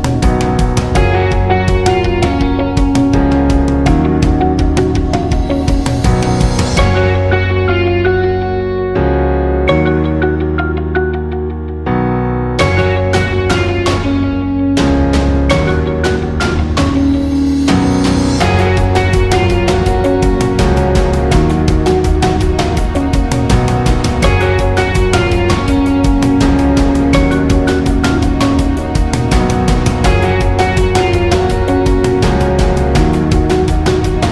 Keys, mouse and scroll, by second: 9.5 v, 10.0-28.3 drag, 31.8-34.3 drag.